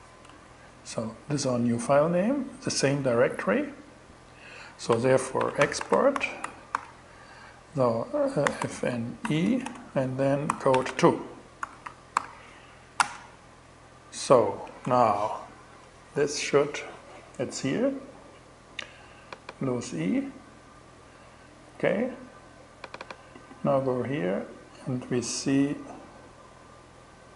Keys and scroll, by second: 0.5 shift+Return, 4.6-6.1 typing, 6.2 alt+5, 7.7-11.1 typing, 11.6 alt+6, 12.4 alt+shift+Return, 14.3 super+Tab.